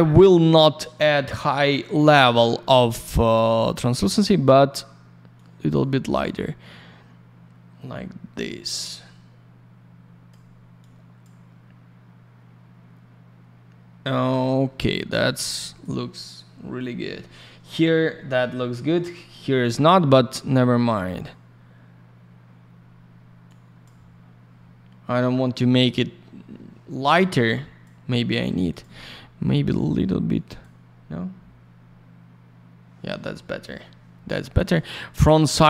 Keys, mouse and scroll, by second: 3.8 click, 3.9 click, 5.3 click, 6.2 click, 10.7 click, 15.1 click, 20.7 click, 23.4 click, 27.5 click, 28.0 click, 28.7 click, 28.8 click, 30.2 click, 34.5 click, 34.6 click.